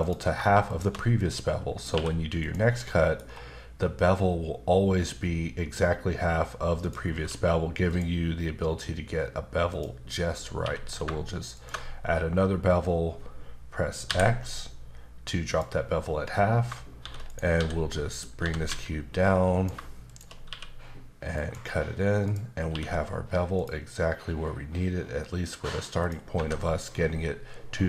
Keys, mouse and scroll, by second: 0.0 click, 0.7 shift+click, 1.2 middle click, 1.9 q, 2.4 click, 2.8 middle click, 3.2 scroll up 1, 6.8 click, 7.2 q, 7.9 click, 9.7 click, 10.6 q, 11.5 ctrl+shift+click, 14.1 x, 15.5 click, 17.0-18.7 typing, 17.2 right click, 18.1 click, 19.5 click, 20.1 shift+click, 20.5 q, 21.4 click, 22.2 click, 22.7 q, 23.5 click, 26.0 click, 26.0 click, 26.4 alt+Caps_Lock.